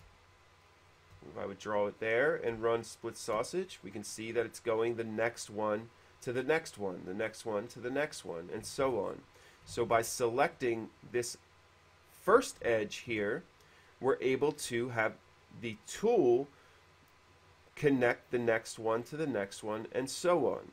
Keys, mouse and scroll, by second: 0.0 space, 0.0 click, 1.0 ctrl+z, 1.0 space, 1.0 q, 1.1 shift+click, 3.0 shift+middle click, 3.4 shift+space, 3.7 middle click, 8.6 middle click, 9.0 ctrl+z, 9.2 middle click, 10.1 ctrl+z, 12.5 click, 13.1 shift+click.